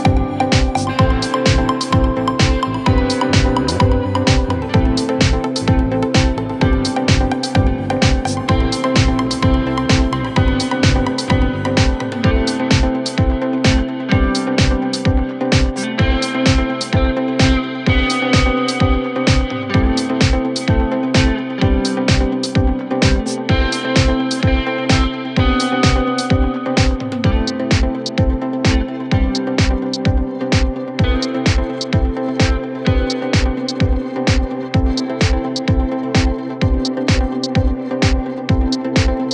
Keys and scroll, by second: 17.6 Delete.